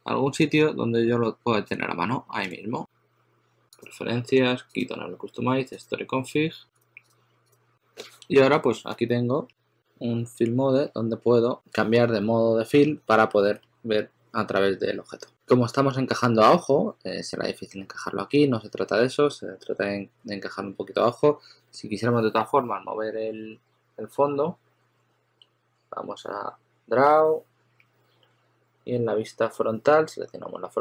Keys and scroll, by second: 13.5 s, 15.3 s, 17.8 s, 20.1 s.